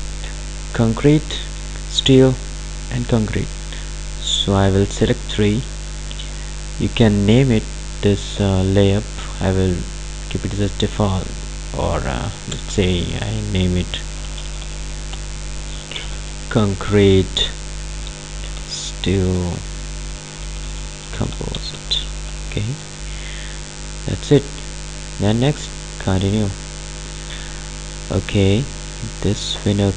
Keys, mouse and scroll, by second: 7.9 click, 12.7 BackSpace, 14.3-23.4 typing, 25.5 click, 29.3-29.9 drag.